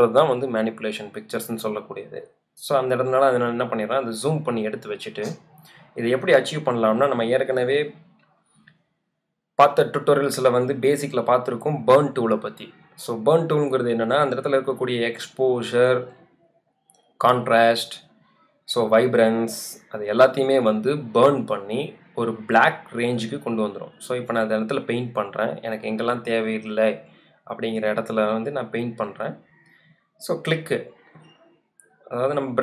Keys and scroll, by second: 0.3 z, 3.7 space, 5.9 z, 7.7 space, 31.9 space.